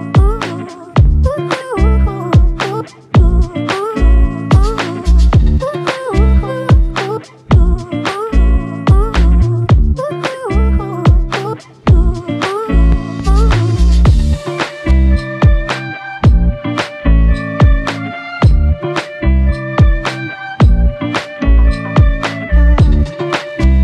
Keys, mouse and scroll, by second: 2.0 double click, 5.3 double click, 18.8 double click.